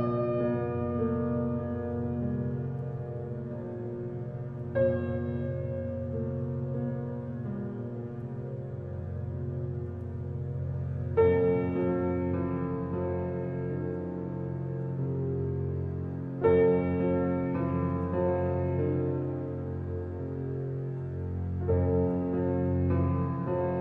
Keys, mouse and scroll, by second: 1.6 middle click, 2.3-2.7 scroll up 1, 2.7-5.4 shift+middle drag, 5.4 click, 5.8-6.8 drag, 7.5 alt+click, 9.1 Tab, 10.0 ctrl+z, 10.2 ctrl+z, 10.6 ctrl+z, 11.7 p, 12.7 Tab, 13.2 click, 14.2 h, 14.7 click, 15.1 Tab, 17.0 click, 19.2-20.9 drag, 21.5-23.8 middle drag.